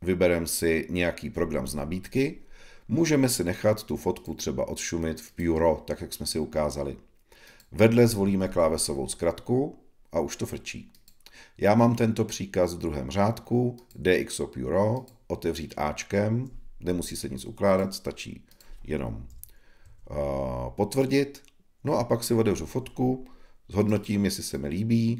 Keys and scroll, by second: 19.2 Left, 19.8 Right.